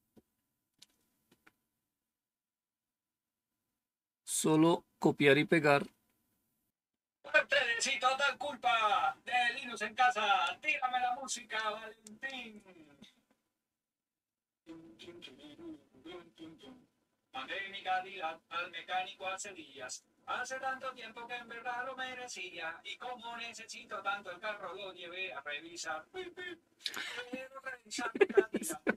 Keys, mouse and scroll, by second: 3.6-4.8 scroll down 2.